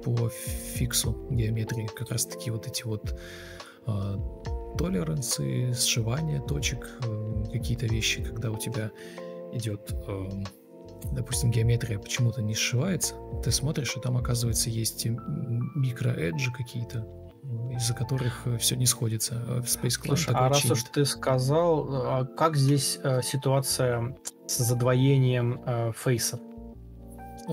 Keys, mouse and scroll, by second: 7.1 ctrl+Delete, 7.5 ctrl+z, 7.9 Delete, 8.2 ctrl+z, 8.9 Delete, 10.1-10.9 typing, 15.5 ctrl+space, 16.5 alt+shift+c, 17.1 ctrl+click, 21.1 shift+click, 21.6 ctrl+d, 22.3 Delete, 25.4 ctrl+click, 25.7 ctrl+click, 27.1 ctrl+alt+shift+o.